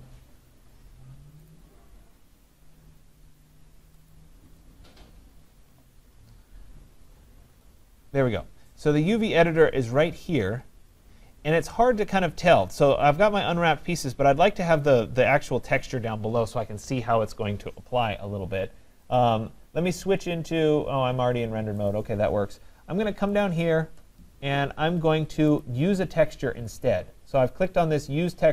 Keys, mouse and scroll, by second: 1.5 click, 8.5 click, 19.2 click, 21.9 click, 23.4 click, 25.6 click.